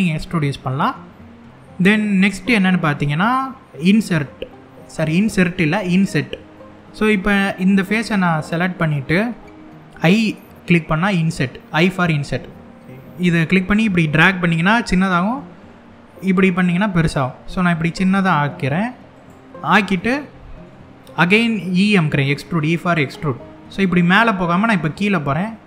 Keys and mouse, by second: 3.8 middle click, 6.2 middle click, 11.9 i, 18.8 click, 19.6 middle click, 20.7 middle click, 22.9 e.